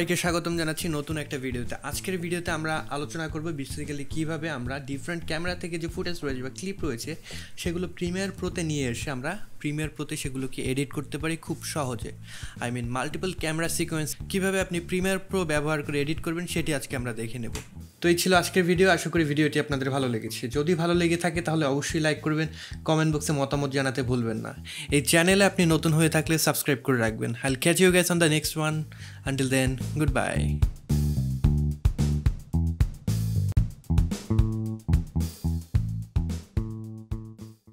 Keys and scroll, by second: 17.6 space.